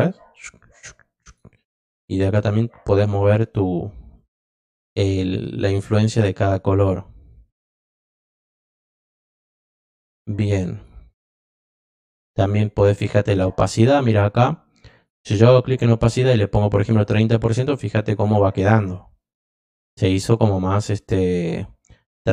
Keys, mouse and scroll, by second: 2.4-3.5 drag, 4.1-5.3 drag, 7.7 click, 8.2 click, 10.7 click, 20.7 click, 21.0 click.